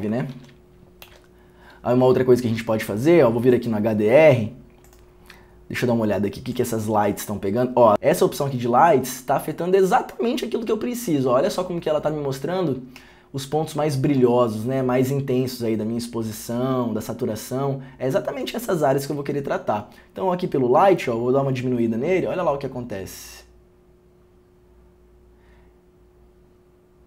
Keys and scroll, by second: 0.4 ctrl+d.